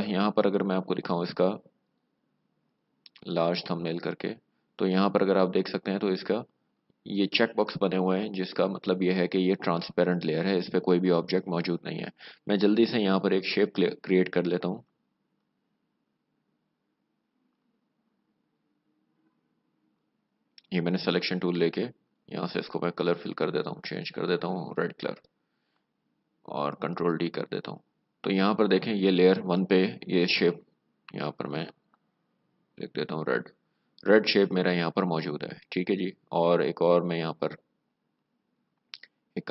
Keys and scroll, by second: 25.4 alt+BackSpace, 26.6 ctrl+d, 27.5 v, 32.5-33.5 typing.